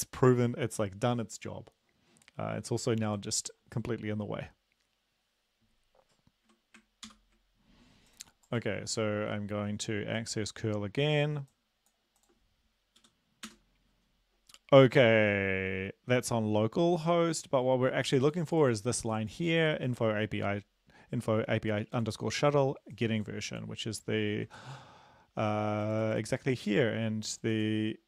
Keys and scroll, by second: 7.1 ctrl+l, 13.0 Up, 13.5 Return, 24.6 ctrl+`.